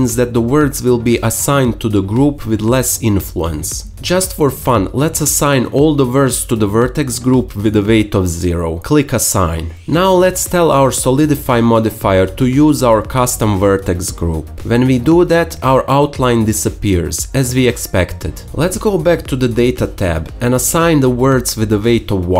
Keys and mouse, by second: 13.1 Tab, 13.8 middle click, 21.3 Tab, 21.3 middle click.